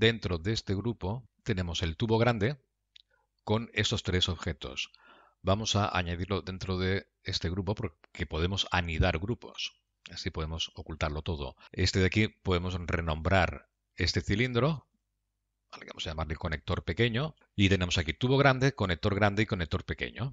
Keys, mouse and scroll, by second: 0.6 click, 1.2 click, 5.4 click, 6.4-15.2 click.